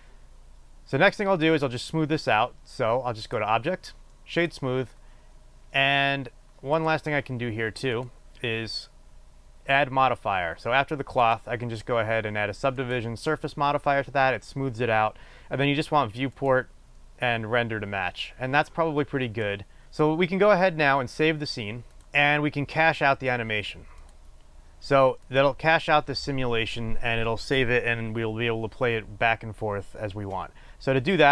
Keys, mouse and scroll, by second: 12.0-17.2 drag, 19.8-22.1 drag.